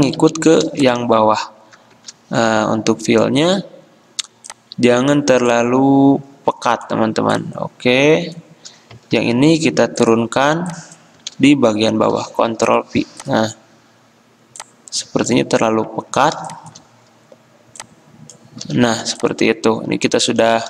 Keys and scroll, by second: 0.4 i, 2.2 x, 9.4 ctrl+x, 9.9 v, 11.5 ctrl+z, 12.4 ctrl+f, 16.6 m.